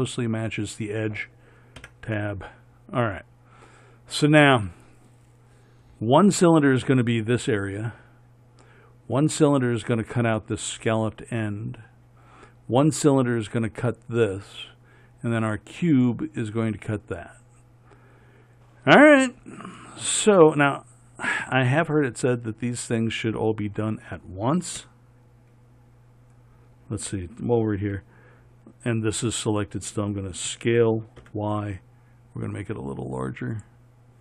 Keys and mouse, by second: 2.1 Tab, 25.1 KP_7, 30.8 s.